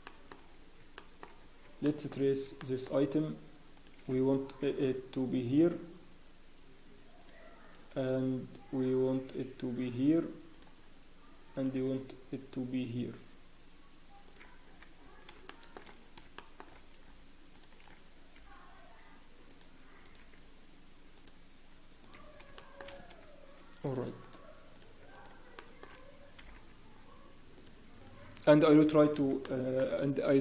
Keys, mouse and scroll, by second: 0.0 shift+middle click, 0.0 scroll up 2, 0.4 scroll down 10, 0.9 shift+middle click, 1.3 scroll up 4, 1.8 shift+middle click, 2.2 scroll up 2, 2.6 shift+middle click, 3.2 scroll up 1, 3.7 click, 4.6 g, 7.9 g, 10.7 scroll down 1, 11.5 click, 11.7-12.1 scroll down 4, 11.7 g, 14.6-14.9 scroll down 1, 14.9-15.3 scroll up 1, 15.4 shift+middle click, 15.4 scroll down 4, 15.8 scroll up 4, 16.0 scroll down 1, 16.3 shift+middle click, 16.7-17.5 scroll down 1, 17.5 click, 17.9-18.3 scroll down 1, 18.3 g, 20.0 click, 20.0 scroll down 1, 20.1 g, 22.0 click, 22.5 shift+middle click, 22.8-23.2 scroll up 1, 23.8 click, 25.1 shift+click, 25.1 scroll up 4, 25.5 shift+middle click, 26.4 g, 28.0 click, 29.4 shift+middle click.